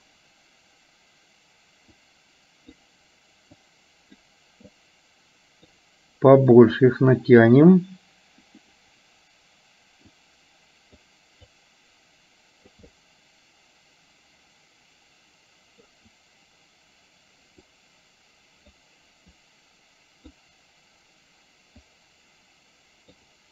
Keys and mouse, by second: 2.1 click, 3.6 click, 4.8-5.8 drag, 6.6-7.6 drag, 10.3 click, 11.5-12.8 drag, 13.0-15.9 middle drag, 17.8-18.9 drag, 19.5-20.5 drag, 22.0-23.3 drag.